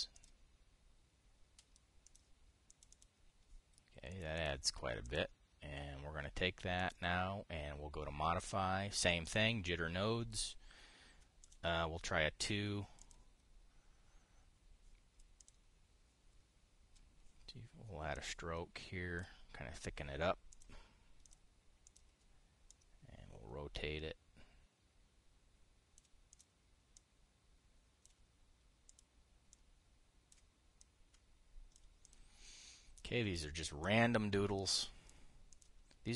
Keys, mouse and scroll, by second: 0.9 click, 2.8 click, 3.4 click, 4.8 click, 5.7 click, 7.5 click, 9.9 click, 12.1 click, 13.7 click, 16.1 click, 18.8-20.0 drag, 21.2 click, 22.0 click, 22.6 click, 23.4-26.8 drag, 27.0 click, 27.6-28.9 drag, 29.6 click, 31.5-32.6 drag, 32.8 click, 33.7 click, 34.5-35.9 drag.